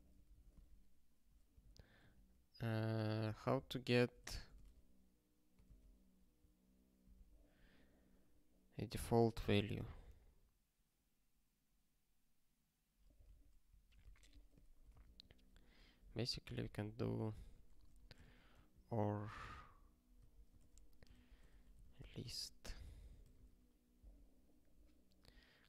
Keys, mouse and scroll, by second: 0.3 Return, 1.6 ctrl+n, 2.0 ctrl+f, 3.0 ctrl+p, 3.3 ctrl+a, 3.5 ctrl+k, 4.2 ctrl+f, 4.3 ctrl+f, 5.7 ctrl+s, 14.0 super+o, 14.7 Return, 14.9 Return, 16.0 ctrl+/, 16.5 ctrl+p, 16.6 ctrl+e, 17.0 Return, 17.4 (, 17.8 o, 18.2 alt+s, 18.7 ctrl+n, 19.2 ctrl+e, 20.2 ctrl+p, 20.5 ctrl+alt+f, 21.1 Return, 21.2-22.4 typing, 22.7 ctrl+s, 23.0 ctrl+g, 23.6 ctrl+k.